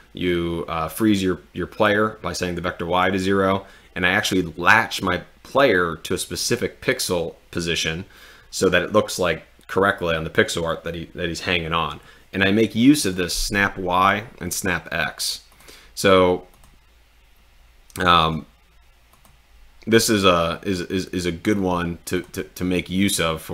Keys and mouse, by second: 13.1 click, 18.2 click, 19.2 click, 22.2 drag.